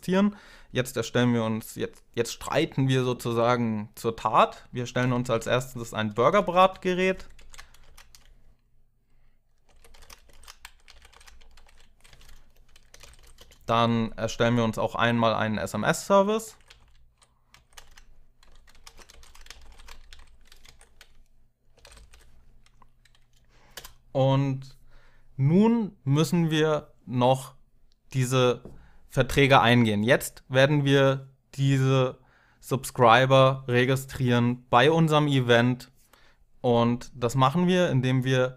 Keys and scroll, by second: 4.4-6.4 typing, 7.1 Down, 7.3 Tab, 7.6 space, 9.2-13.3 typing, 14.9 Tab, 15.7-22.0 typing, 17.3 Tab, 23.5 Return.